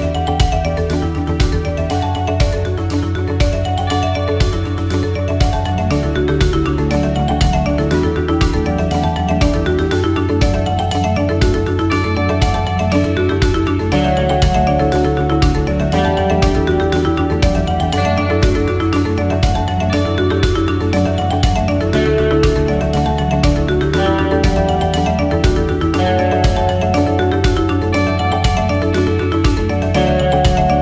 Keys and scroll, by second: 0.7 ctrl+=, 8.4 ctrl+=, 20.3 ctrl+0, 29.3 ctrl+=.